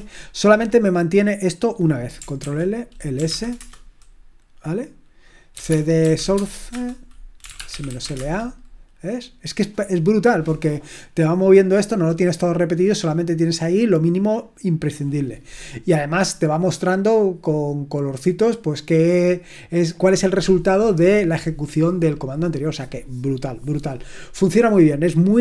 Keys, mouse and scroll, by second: 0.0-1.0 typing, 2.4 ctrl+l, 2.9-3.8 typing, 5.3-8.5 typing.